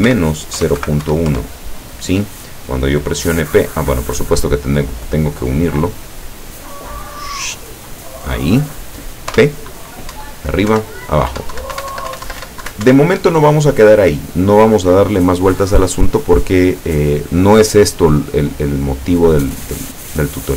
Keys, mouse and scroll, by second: 0.1 KP_Subtract, 0.6 KP_0, 0.8 KP_Decimal, 1.1 KP_1, 1.3 KP_Enter, 5.1 click, 6.8-8.1 drag, 9.4 p, 10.2 Up, 10.8 Down, 11.4 Up, 11.6 Down, 11.8 Up, 12.0 Down, 12.2 Up, 12.4 Down, 12.5 Up, 12.7 Down, 12.9 Up, 13.3 Escape, 16.6-17.2 scroll down 2, 19.0 click, 20.2 click.